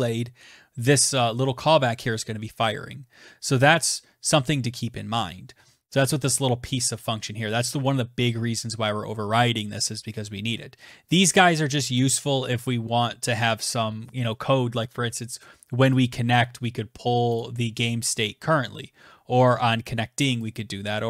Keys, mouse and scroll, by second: 1.9 click, 6.9 click, 8.4 scroll, 10.2 click, 14.2 click, 15.6 click, 18.7 click.